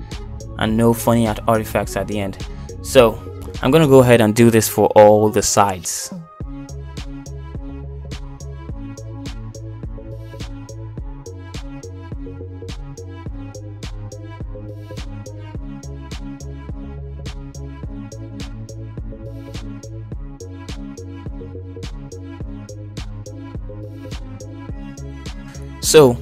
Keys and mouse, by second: 0.3 Tab, 2.1 shift+middle click, 2.6 middle click, 3.2 shift+middle click, 3.8 middle click, 4.8 middle click, 6.3 k, 7.0 shift+middle click, 7.2 k, 9.1 shift+middle click, 9.2 shift+middle click, 9.6 middle click, 9.9 shift+middle click, 10.1 middle click, 10.2 k, 10.9 k, 13.0 shift+middle click, 13.2 k, 16.1 middle click, 16.2 k, 17.7 middle click, 17.9 shift+middle click, 18.1 shift+middle click, 18.3 k, 19.9 shift+middle click, 20.4 middle click, 21.8 shift+click, 21.9 click, 22.1-24.3 typing, 22.1 click, 22.4 middle click, 22.9 shift+middle click, 23.1 shift+click, 23.6 click, 24.2 shift+click, 24.9-26.2 middle drag.